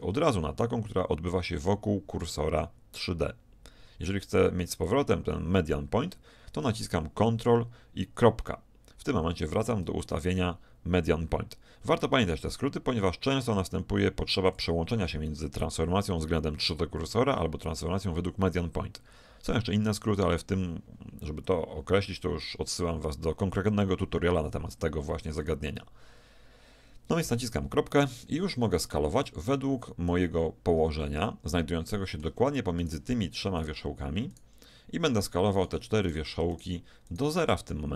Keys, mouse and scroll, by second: 4.9 click, 8.2 ctrl+., 14.5-17.0 drag, 27.5 ., 29.3-31.1 middle drag, 32.5 middle click, 32.9-34.5 drag.